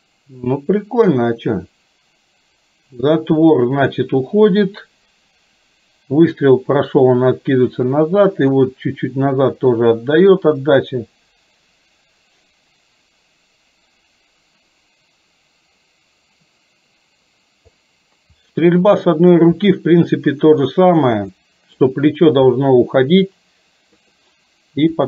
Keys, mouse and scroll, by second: 0.5-17.8 drag, 18.5-19.5 middle drag, 21.5 middle click, 22.7-24.1 middle drag.